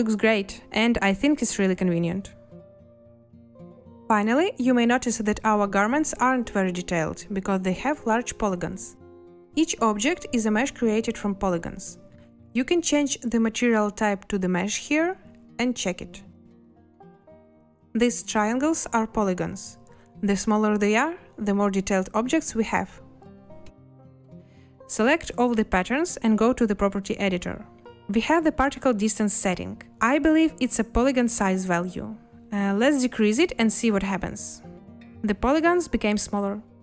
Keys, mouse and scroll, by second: 33.9-34.6 typing.